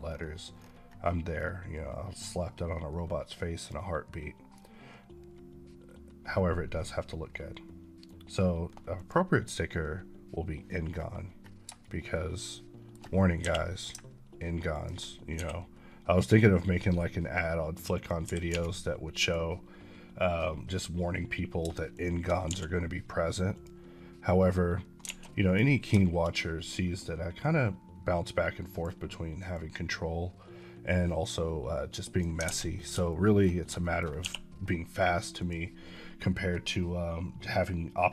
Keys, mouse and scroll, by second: 0.0-0.4 scroll up 8, 3.4 click, 8.8 click, 10.7 scroll up 1, 11.7 shift+middle click, 13.3 g, 14.6 ctrl+click, 15.2 s, 17.9 click, 18.1 g, 18.4 z, 19.1 click, 21.5 shift+click, 21.9 shift+click, 22.0 shift+click, 22.2 click, 22.4 d, 25.1 a, 25.3 click, 27.3 click, 29.7 click, 32.2 click, 32.5 a, 33.0 shift+middle click, 33.4 scroll down 1, 33.7 shift+middle click, 34.1 d, 35.3 click.